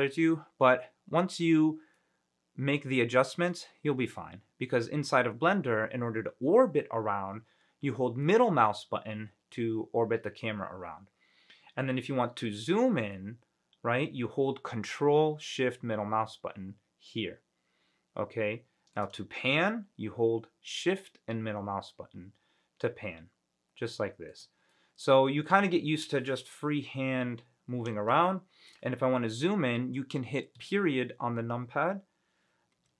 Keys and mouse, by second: 2.1 middle click, 2.2 drag, 2.2 right drag, 2.3-3.7 middle drag, 8.4-12.0 middle drag, 13.3-19.1 ctrl+shift+middle drag, 19.9-24.5 shift+middle drag, 24.9-26.2 middle drag, 28.4-28.9 shift+middle drag, 30.7 KP_Decimal.